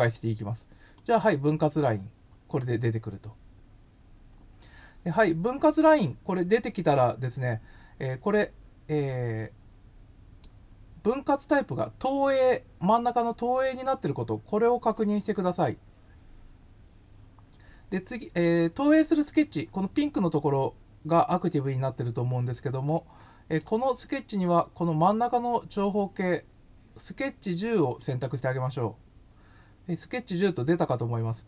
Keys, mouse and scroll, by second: 0.9 click, 8.3-10.4 middle drag, 22.9 middle click, 27.8 click.